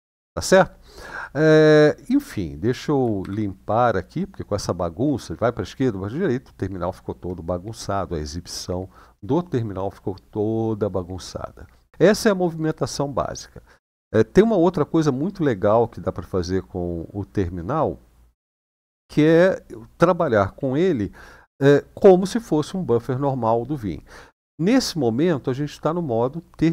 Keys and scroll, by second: 3.0 ctrl+l.